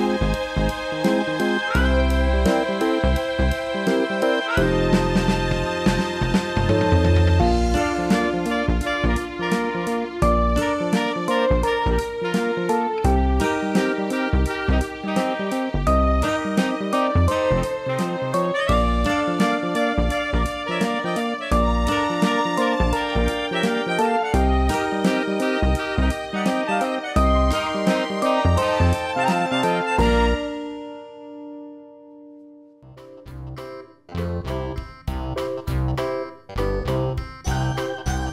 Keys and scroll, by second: 5.7 ctrl+i, 12.0 ctrl+j, 27.5 ctrl+i.